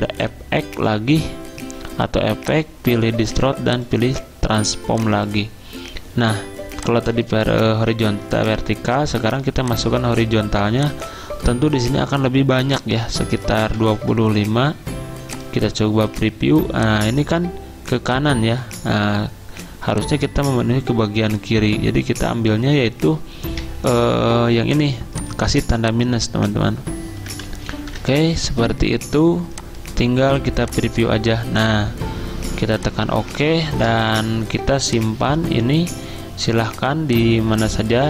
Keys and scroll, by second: 13.6-14.5 typing, 27.3 BackSpace.